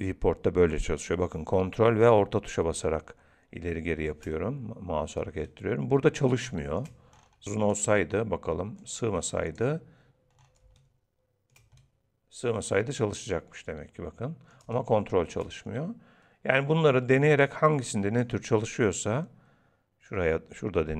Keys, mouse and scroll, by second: 5.4 ctrl+middle click, 7.1 scroll up 1, 7.4 click, 7.4-7.9 scroll down 3, 8.8 click, 10.0-10.3 scroll down 5, 10.3 scroll up 4, 10.8 ctrl+middle click, 11.8 middle click, 14.7 ctrl+middle click, 17.4 click.